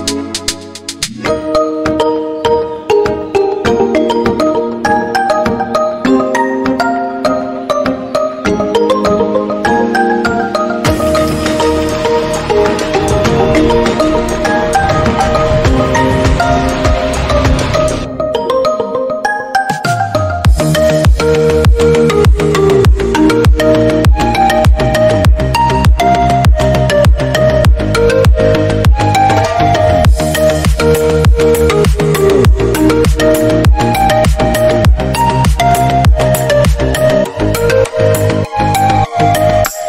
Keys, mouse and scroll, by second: 0.4 click, 1.1 click, 1.3 scroll down 2, 1.4-2.5 middle drag, 2.5 scroll up 1, 2.7-3.1 drag, 3.1 middle click, 3.8 shift+d, 4.3-4.9 middle drag, 4.9 g, 5.6 middle click, 6.0 click, 6.1 scroll down 3, 6.2 middle click, 6.6-7.0 scroll up 2, 7.0 scroll down 1, 7.2 scroll up 1, 7.3-7.8 drag, 7.8 shift+d, 10.3-10.9 middle drag, 10.9 KP_7, 11.1-11.4 scroll up 1, 11.4 g, 12.6 g, 13.4 middle click, 13.8 click, 14.8-15.4 middle drag, 15.4 KP_7, 16.5-18.3 drag, 18.3 h, 18.5 click, 18.5 h, 18.7 click, 18.8 h, 18.9 click, 19.0 h, 19.2 scroll up 1, 19.3 click, 19.6-20.5 middle drag, 20.5 KP_7, 20.8 h, 21.0 right click, 21.6 ctrl+z, 22.2 g, 22.9-23.8 middle drag, 23.8 click, 24.0-24.5 middle drag, 24.5 g, 24.8 click, 25.0 g, 25.3 click, 25.8 KP_7, 26.1 click, 26.6 shift+d, 27.6 shift+d, 28.3 shift+middle click, 29.1 scroll down 2, 29.2-31.2 middle drag, 31.2 scroll up 1, 31.3 click, 31.5 middle click, 32.0 shift+d, 32.9 scroll down 3, 33.0 middle click, 33.2-33.7 scroll up 1, 33.7 shift+d, 34.3 middle click, 34.7 Delete, 34.8 click, 35.5 shift+d, 36.1-36.6 middle drag, 36.6 scroll up 1, 36.8-37.3 drag, 37.3 shift+d, 38.0 scroll down 3, 38.1-38.5 middle drag, 38.5-39.3 scroll up 4, 38.6 middle drag, 39.3-39.6 shift+middle drag, 39.6-39.8 scroll down 2.